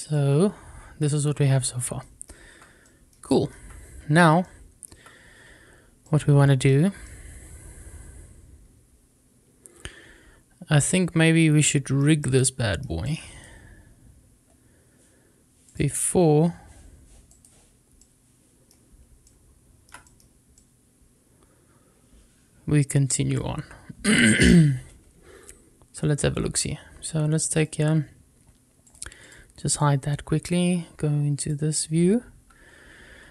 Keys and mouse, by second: 1.9 middle drag, 2.7-3.1 middle drag, 3.3 shift+middle click, 6.2 shift+middle click, 6.5 shift+middle drag, 6.9-10.9 middle drag, 11.6 shift+middle drag, 12.0-12.7 shift+middle drag, 12.9 shift+right click, 17.2 shift+right click, 17.8 shift+middle click, 19.5 shift+middle click, 19.9 middle click, 20.4-21.3 middle drag, 21.9-23.2 middle drag, 28.7 click, 29.0 click, 31.2 click, 33.2 shift+a.